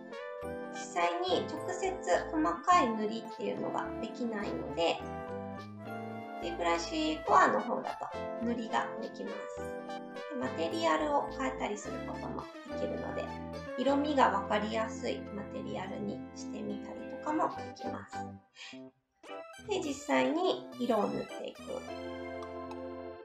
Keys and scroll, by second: 19.6 s.